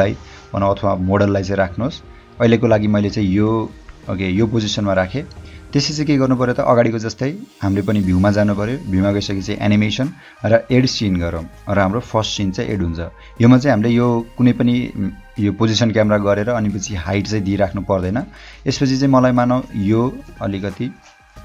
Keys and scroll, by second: 1.0 h, 3.4 o, 20.5 j, 21.0 h.